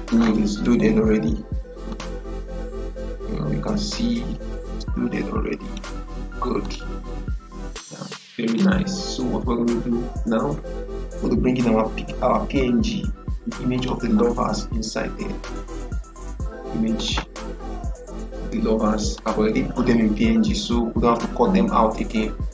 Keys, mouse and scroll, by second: 1.8-11.1 drag, 13.7 click, 16.9-22.5 drag.